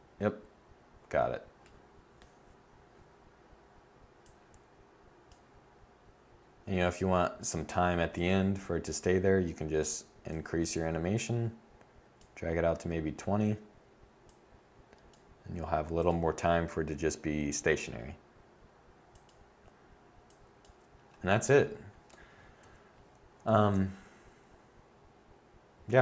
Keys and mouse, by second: 18.7-21.5 drag, 22.2 a.